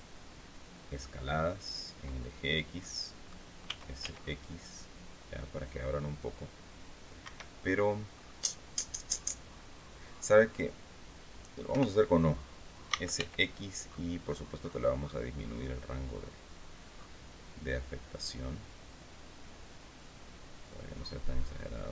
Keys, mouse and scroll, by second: 2.3 click, 3.1 s, 3.5 x, 6.7 Escape, 7.6 scroll up 2, 11.2-13.1 typing, 13.3-14.0 scroll up 3, 14.9 scroll up 1, 16.1 scroll up 1, 16.4 scroll down 1, 17.0 scroll down 1, 19.5-20.1 scroll down 2, 21.4 scroll up 2.